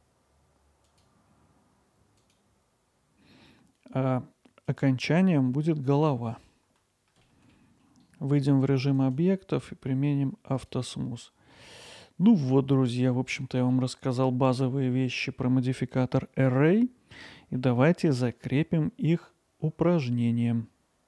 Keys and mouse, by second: 1.0-6.6 drag, 6.6-7.3 middle drag, 7.7 middle click, 9.0-10.7 right drag, 13.3 middle click.